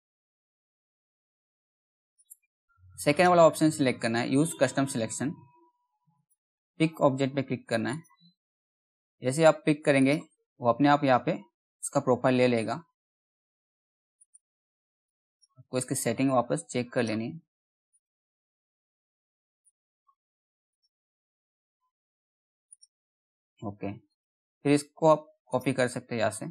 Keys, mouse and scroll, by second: 5.6 click, 10.1 scroll up 1, 11.1-12.3 scroll down 1, 13.7-20.2 drag, 25.0 right click, 26.0 click.